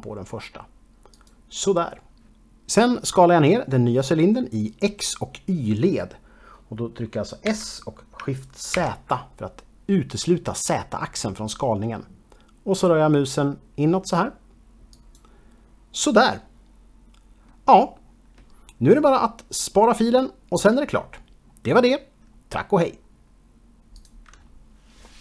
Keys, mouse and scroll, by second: 1.1 click, 7.5 s, 8.7 shift+z, 14.9 click, 16.4 middle click.